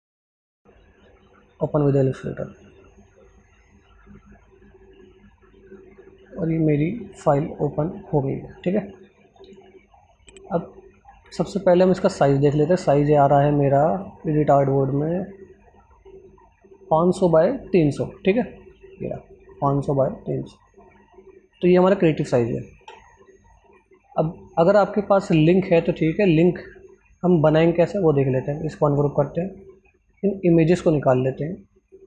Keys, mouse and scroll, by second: 10.6 ctrl+alt+scroll down 2, 13.0 click, 21.5 click, 24.2 right click, 25.6 click, 29.3-32.0 drag.